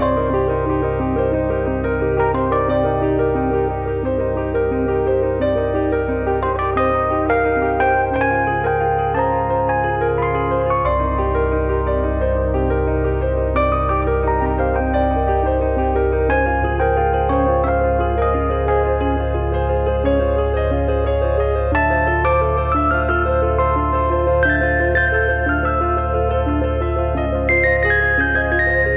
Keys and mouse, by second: 1.4 click, 1.8 click, 2.6 click, 3.6 click, 4.8 click, 5.2 w, 6.5 click, 7.3 click, 9.0 click, 11.3 click, 15.8 click, 17.4 click, 18.0 click, 18.8 click, 19.7 click, 20.0 click, 21.1 click, 21.7 click, 22.4 shift+middle click, 23.0 click, 24.2 click, 24.9 click, 25.8 click, 27.3 click, 28.0 click, 28.6 click.